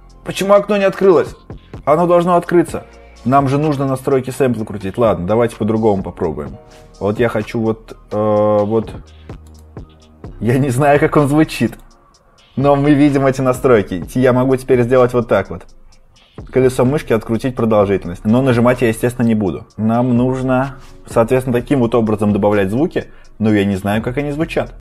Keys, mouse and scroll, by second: 9.4 right click, 11.6 click, 14.4-20.6 scroll.